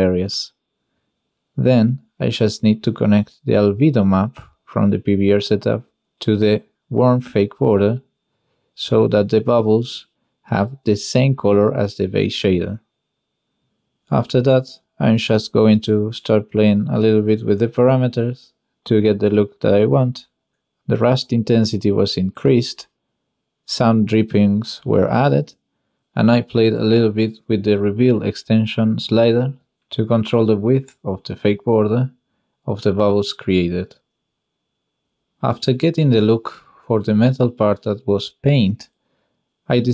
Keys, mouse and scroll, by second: 1.7-2.9 middle drag, 5.3 click, 5.6 click, 6.1 click, 8.2 click, 9.5 click, 9.7-10.3 drag, 12.3 click, 12.7 click, 13.1 n, 14.0 shift+middle click, 14.1 shift+click, 14.7 shift+middle click, 14.8 shift+click, 14.9-18.3 shift+middle drag, 21.5 click, 21.9-22.9 drag, 24.2 middle click, 24.4 click, 25.4 click, 26.1 click, 26.7 click, 28.3 click, 29.1 middle click, 30.0-30.3 ctrl+middle drag, 30.4 shift+middle drag, 31.6-33.6 middle drag, 35.3-36.5 middle drag, 37.7 middle click, 37.8-38.2 drag, 38.4-38.7 middle drag, 39.0 middle drag, 39.2 click, 39.6-39.9 drag.